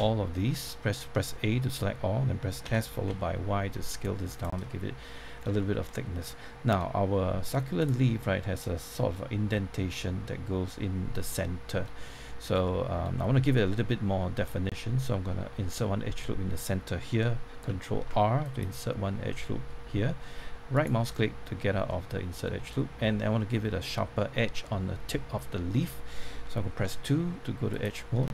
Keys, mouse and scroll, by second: 0.3 middle click, 1.4-2.6 scroll up 1, 2.6-3.1 typing, 4.3 click, 4.6 middle click, 5.5-7.5 shift+middle drag, 7.8 click, 11.3 middle click, 18.4-19.5 drag, 20.7 right click, 21.1 middle click, 22.6 scroll up 1, 26.8 2, 27.7 click.